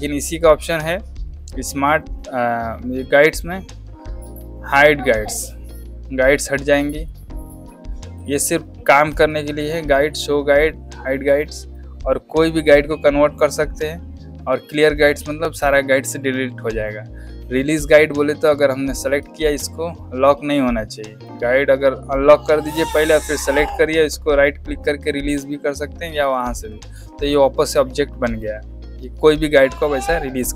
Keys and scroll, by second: 26.2 space.